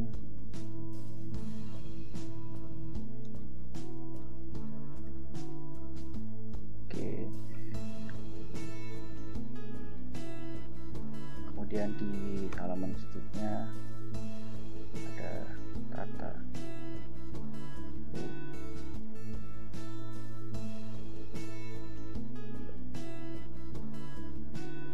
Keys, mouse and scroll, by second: 0.0-6.4 typing, 7.7 Up, 8.7 Down, 9.3 Return, 12.6 ctrl+Return, 15.0 scroll down 2, 15.5-24.9 typing.